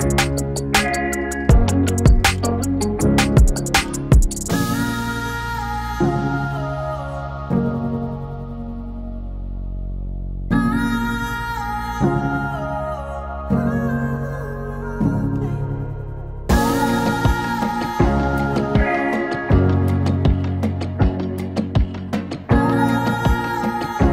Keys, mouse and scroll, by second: 1.4 ctrl+d, 2.5-4.1 drag, 4.1 r, 4.9 click, 7.3-8.6 typing, 9.3 click, 10.6-13.1 drag, 13.1 space, 14.4-17.1 drag, 17.1-24.1 drag.